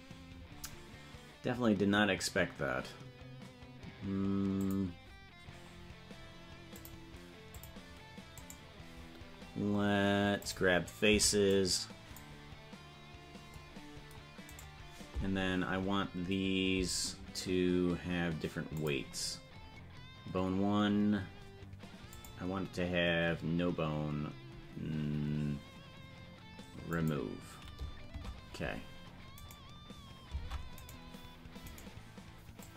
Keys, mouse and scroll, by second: 4.6 click, 6.8 click, 7.5 click, 8.3-10.4 right drag, 10.4 click, 11.1 c, 18.7 click, 22.1 click, 26.9 click, 28.2 Tab, 29.5 right click, 30.4 ctrl+Tab, 31.0 right click, 32.6-32.7 drag.